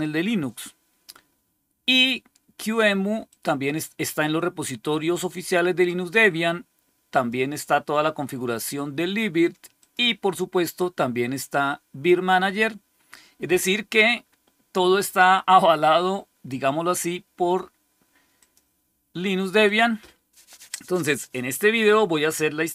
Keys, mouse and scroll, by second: 3.2 click, 7.0 click, 9.7 click, 18.3 click, 19.5 click.